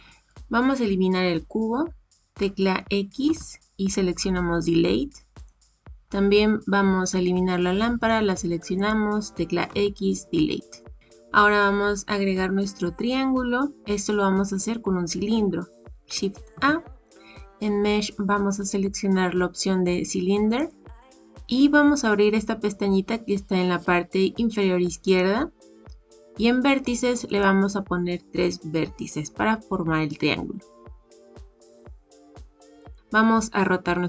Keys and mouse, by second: 3.2 x, 8.8 click, 9.6 x, 16.5 shift+a, 27.2-31.7 drag, 32.7 click.